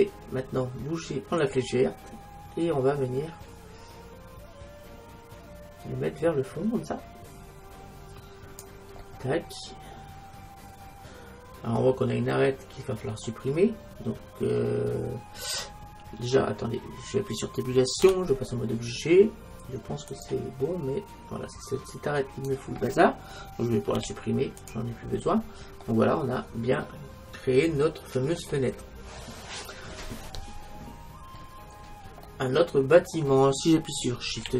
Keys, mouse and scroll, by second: 1.5-3.1 drag, 18.1 Tab, 22.3-24.0 right drag, 24.0 x, 25.9 middle click, 27.4 x, 29.8-30.9 scroll up 1, 30.9-31.5 scroll up 1, 31.5-32.5 middle drag, 34.5 shift+z.